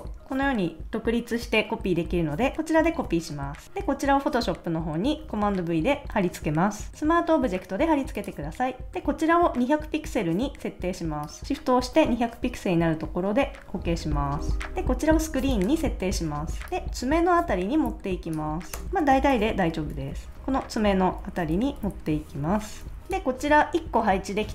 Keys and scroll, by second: 2.9 super+c, 3.6 a, 5.2 super+v, 18.7 Return, 18.8 Right, 19.1 Left, 19.5 Up, 19.9 Left, 20.1 Up, 20.4 Right, 20.8 Down, 21.2 Right, 21.5 Up, 21.8 Left.